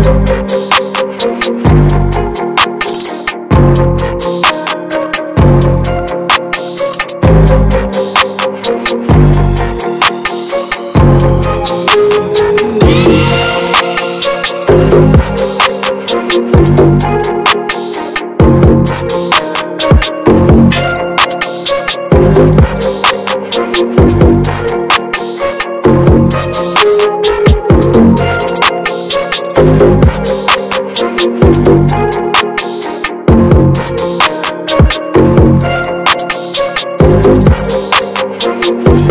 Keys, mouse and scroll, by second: 0.8-2.9 drag, 2.9-4.0 middle drag, 4.0 ctrl+z, 4.3-5.4 ctrl+drag, 5.4 middle click, 5.9 ctrl+z, 6.7-7.3 scroll down 1, 7.3 middle click, 7.8-8.9 drag, 8.9 ctrl+z, 9.3-10.0 ctrl+scroll down 2, 11.3 ctrl+scroll down 2, 12.8-17.6 drag, 17.6 ctrl+z, 17.9 ctrl+z, 18.3-19.9 drag, 19.9 middle click, 20.4 ctrl+z, 20.8-23.1 drag, 23.1 ctrl+z, 23.6 shift+f, 24.8-28.4 drag, 28.4 ctrl+z, 31.2 click, 31.8-34.6 middle drag, 34.6 shift+s, 35.2-39.1 ctrl+drag.